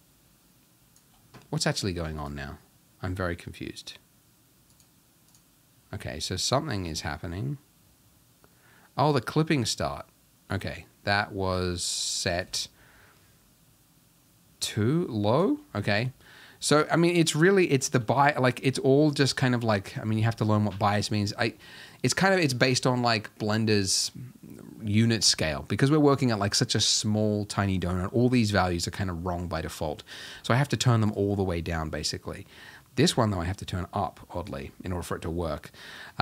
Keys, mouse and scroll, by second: 2.3 click, 4.8 click, 5.3 click, 7.1-9.9 drag, 12.5-36.2 drag.